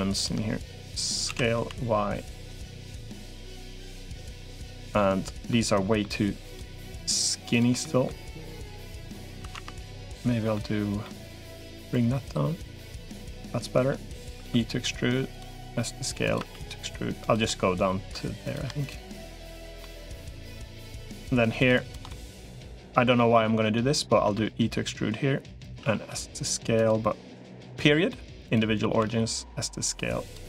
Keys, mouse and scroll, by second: 1.1 s, 2.7 middle click, 3.3 3, 4.5 middle click, 5.3 middle click, 6.7 shift+click, 7.3 shift+click, 7.6 middle click, 9.3 ctrl+z, 9.9 middle click, 10.8 middle click, 11.9 click, 12.8 middle click, 14.3 e, 15.5 s, 16.3 e, 17.2 middle click, 18.9 click, 19.3 shift+click, 19.6 middle click, 20.3 click, 21.9 middle click, 23.0 middle click, 24.1 e, 25.7 s, 28.9 s, 30.3 middle click.